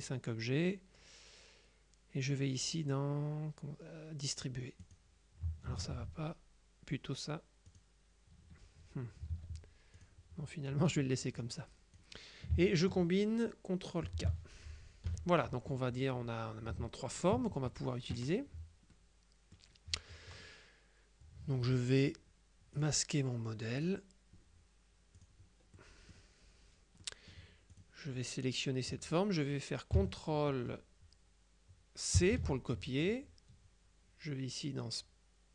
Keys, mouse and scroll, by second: 4.9 click, 5.9 ctrl+z, 7.8 click, 9.4 ctrl+z, 10.1 click, 11.5-12.5 drag, 14.1 ctrl+k, 15.1 KP_Subtract, 16.1-17.8 drag, 19.0-20.1 middle drag, 22.9 click, 23.9 click, 25.3 click, 25.8 middle click, 27.1 middle click, 27.8 click, 27.8 right click, 32.3 ctrl+c.